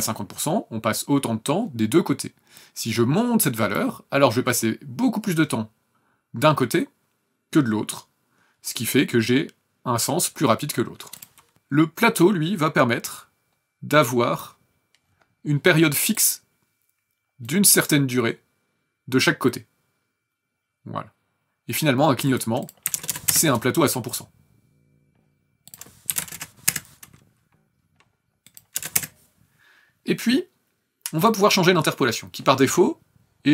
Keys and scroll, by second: 11.5 KP_Enter, 22.8 KP_1, 22.9 KP_0, 23.1 KP_0, 23.3 KP_Enter, 26.1 KP_5, 26.2 KP_0, 26.6 KP_Enter, 28.7 KP_0, 28.9 KP_Enter.